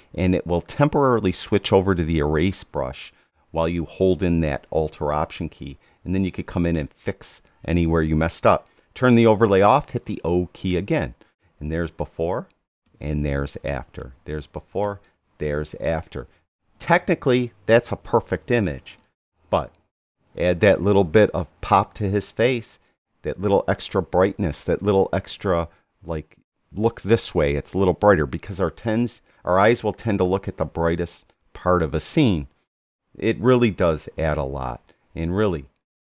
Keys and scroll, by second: 9.8 o, 11.9 \, 14.0 \, 16.7 \, 19.0 \, 33.7 Right.